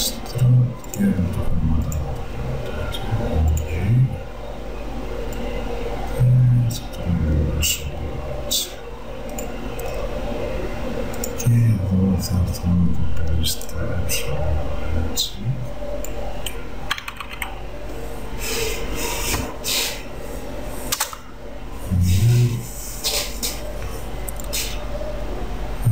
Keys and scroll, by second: 17.0 BackSpace, 21.0 Return.